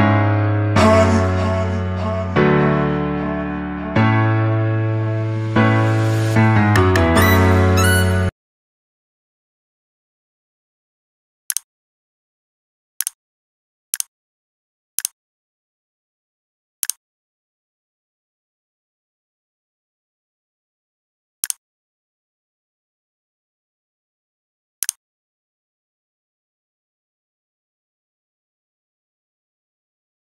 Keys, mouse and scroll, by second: 4.5 c, 5.5 click, 6.3 ctrl+v, 7.1 click.